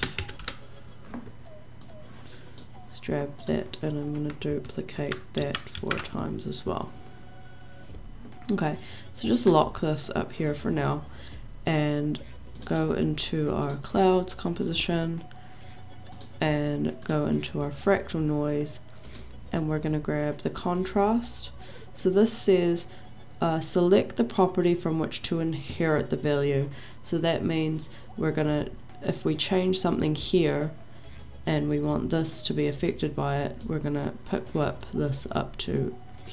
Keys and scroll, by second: 0.0-0.9 typing, 4.9 ctrl+d, 5.4 ctrl+d, 5.8 ctrl+d.